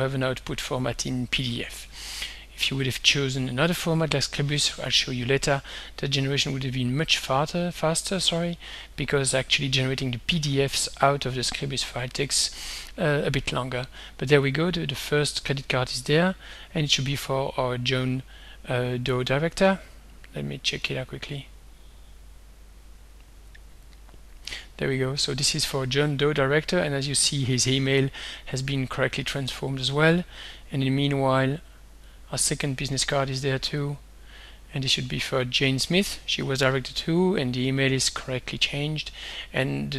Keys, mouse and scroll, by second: 1.9 click, 6.4 click, 14.5 click, 16.0 click, 19.3 click, 21.0 click, 22.9 click, 24.2-25.3 drag, 32.1 click, 33.3 click, 33.7 click, 39.2 click.